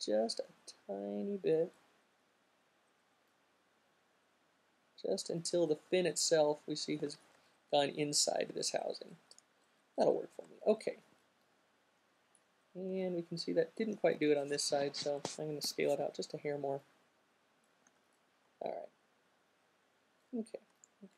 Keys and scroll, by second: 7.3 alt+q, 14.3 alt+super+z, 17.3 alt+q.